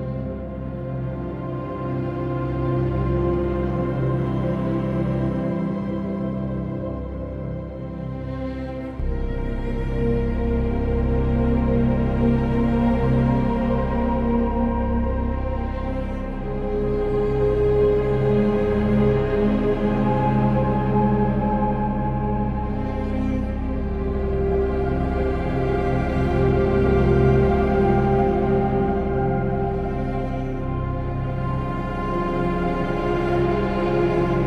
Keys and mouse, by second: 10.5 click, 12.1 click, 16.1 click, 16.5 Tab, 18.9 shift+s, 19.9 shift+s, 21.5 Tab, 23.8-25.3 drag, 27.5 click, 30.3 click, 31.3 ctrl+a, 32.3 Tab, 32.8 click, 33.8 ctrl+KP_Add, 33.9 ctrl+KP_Add, 34.0 ctrl+KP_Add, 34.1 ctrl+KP_Add.